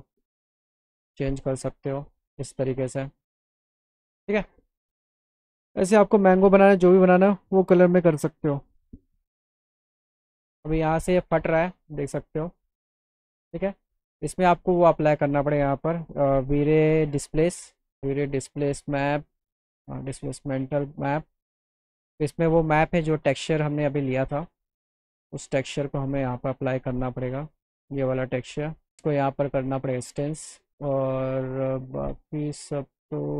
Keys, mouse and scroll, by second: 0.2 click, 11.1 click, 11.6 click, 12.7 middle click, 14.7 click, 16.4 v, 19.4 click, 21.5 click, 23.8 click, 26.2 click, 27.9 click, 29.0 click, 30.7-33.3 drag.